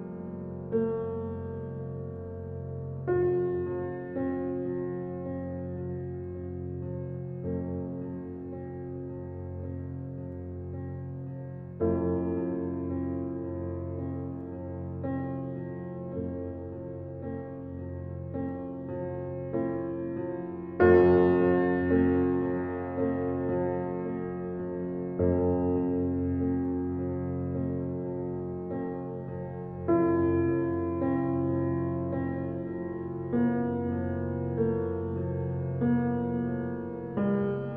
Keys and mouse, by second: 4.1-5.0 drag, 5.6 s, 8.5 s, 12.5-13.7 drag, 17.8 click, 19.8 click, 22.2 click, 22.4 click, 23.0-23.6 drag, 24.8-25.2 drag, 26.0 click, 27.9 2, 28.3 click, 28.8 drag, 29.6 s, 31.4 drag, 32.2 click, 33.0 s, 36.8-37.7 drag.